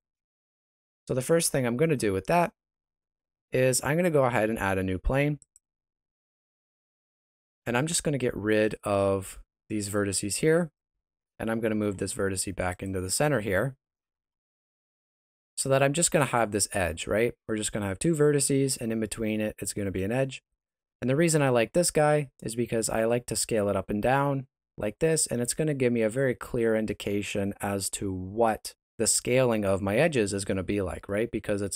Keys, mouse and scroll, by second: 1.0 middle click, 1.9 shift+middle click, 2.5 shift+a, 6.7 Tab, 7.7 right click, 8.6 shift+right click, 9.2 x, 10.5 alt+right click, 11.4 g, 13.0 Tab, 13.9 g, 15.6 shift+middle click, 17.0 Tab, 18.3 Tab, 18.6 middle click, 22.4 s, 31.5 middle click.